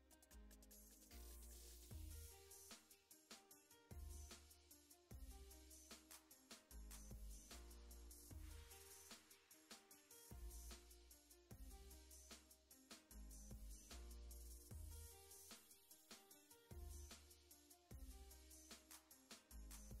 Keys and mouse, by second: 0.1 middle click, 0.3 click, 0.7 f, 0.8 x, 0.9 ctrl+click, 1.2 middle click, 1.3 f, 1.5 shift+click, 1.8 c, 2.9 middle click, 3.1 shift+c, 3.3 ctrl+click, 3.7 ctrl+click, 4.1 ctrl+click, 4.5 ctrl+click, 5.1 click, 5.6 shift+middle click, 5.7 ctrl+click, 6.5 f, 6.9 ctrl+z, 6.9 ctrl+z, 7.1 shift+click, 7.6 middle click, 7.9 middle click, 8.2 shift+f, 8.2 ctrl+shift+middle click, 8.7 shift+c, 8.7 click, 9.4 shift+middle click, 9.5 click, 10.1 click, 10.5 shift+middle click, 11.2 shift+c, 11.6 ctrl+click, 11.8 middle click, 12.2 ctrl+click, 13.3 ctrl+click, 14.1 shift+middle click, 14.7 ctrl+click, 15.4 ctrl+click, 15.6 shift+f, 16.0 shift+click, 16.2 middle click, 16.4 shift+click, 16.7 middle click, 17.8 shift+click, 18.3 ctrl+shift+middle click, 18.6 shift+f, 18.6 shift+c, 18.7 click, 18.9 click, 19.3 click.